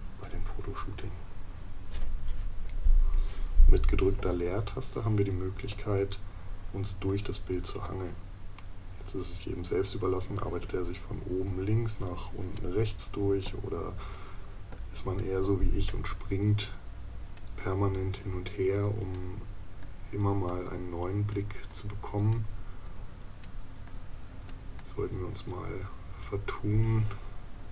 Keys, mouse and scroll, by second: 4.2 space.